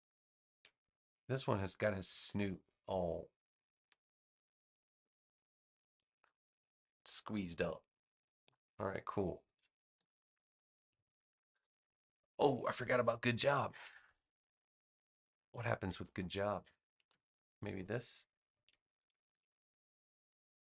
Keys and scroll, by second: 9.9 super+-, 13.3 super+=, 15.0 space, 18.9 super+c, 19.2 super+v.